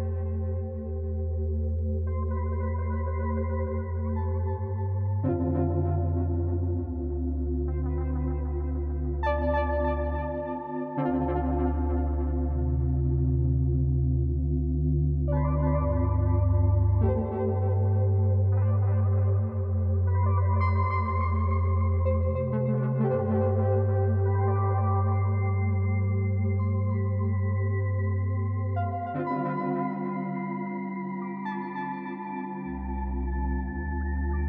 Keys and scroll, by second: 3.3 e, 9.3 z, 10.4-11.9 typing, 16.1 f, 19.4 b, 28.4 b, 29.4-30.3 typing, 31.5 e.